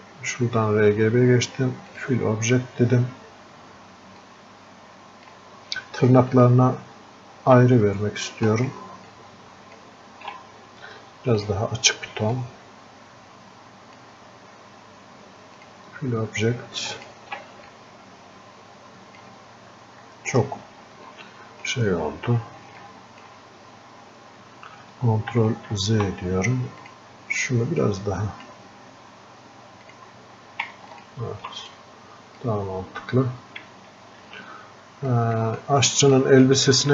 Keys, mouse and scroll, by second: 20.6-21.1 scroll down 1, 21.2 alt+click, 22.2 scroll down 1, 23.1-26.1 alt+drag, 26.1 ctrl+z, 27.0-31.8 drag, 31.8-34.3 drag, 34.3 f, 35.5-36.9 drag.